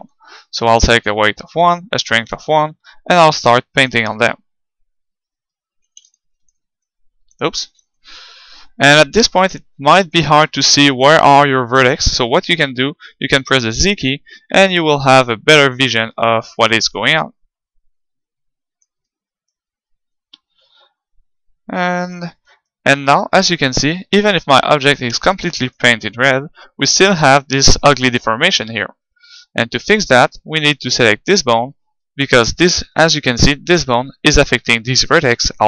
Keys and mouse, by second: 2.9-4.6 drag, 4.4-7.9 middle drag, 6.9-9.9 drag, 7.6 ctrl+z, 13.5 z, 14.8-16.6 middle drag, 16.9-18.7 drag, 19.3-20.6 middle drag, 20.2-21.9 drag, 23.6-25.4 middle drag, 25.2-26.8 drag, 26.3-27.9 middle drag, 31.0-32.8 right drag, 32.3-34.0 middle drag.